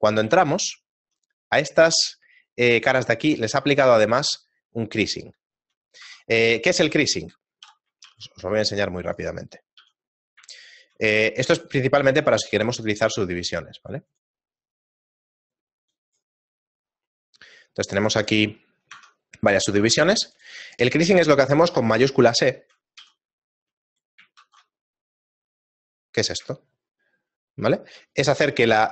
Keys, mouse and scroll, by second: 0.8 shift+middle click, 5.4 shift+middle click, 6.5 Tab, 6.6 shift+middle click, 7.7 KP_7, 8.1 shift+a, 9.5 middle click, 9.8 g, 10.6 shift+middle click, 11.2 middle click, 11.9 middle click, 11.9 scroll down 1, 12.5 shift+middle click, 13.6 click, 14.9 click, 19.0 Tab, 19.8 ctrl+Tab, 20.7 right click, 21.2 shift+middle click, 23.0 a, 23.9 right click, 24.5 shift+e, 26.6 shift+middle click, 28.6 right click.